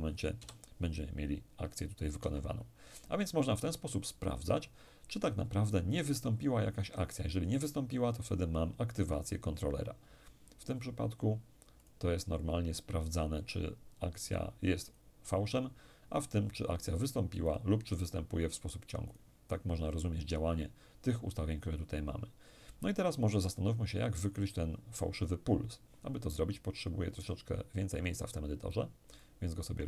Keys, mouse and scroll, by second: 0.0 p, 1.8 Escape, 11.4 click, 14.5 click, 17.1 click, 18.7 click, 28.8 click.